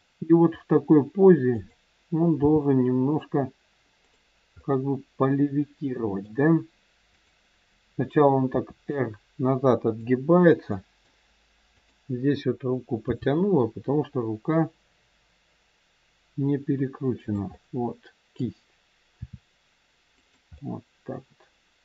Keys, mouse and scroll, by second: 0.7 middle click, 1.4 click, 2.4 g, 4.5 middle click, 7.0 click, 8.4 r, 10.8 middle click, 11.7 click, 12.9 g, 17.5 middle click, 19.2 r, 20.5 middle click.